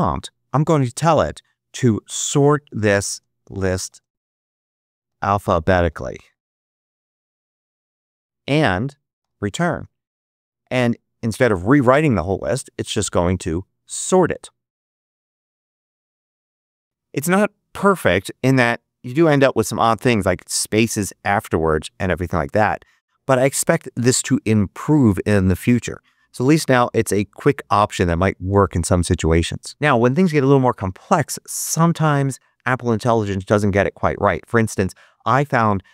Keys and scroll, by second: 1.4-7.6 typing, 9.1 Return.